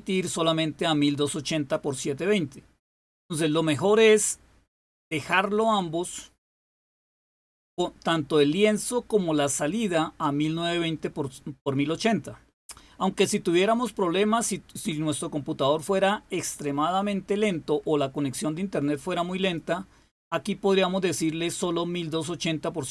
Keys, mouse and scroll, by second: 3.8 click, 5.4 click, 19.3 click.